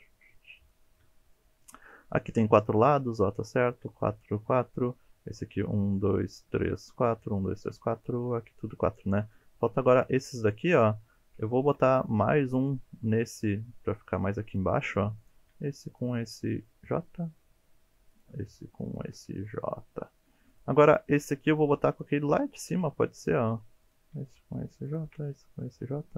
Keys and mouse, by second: 0.7 shift+middle click, 9.2 shift+middle drag, 10.6 shift+middle click, 11.7 ctrl+r, 14.5 click, 15.9 shift+click, 16.9 j, 18.1 click, 18.9 shift+click, 19.6 j, 20.5 click, 21.9 shift+click, 22.8 j, 23.9 click, 24.9 shift+click, 25.8 j.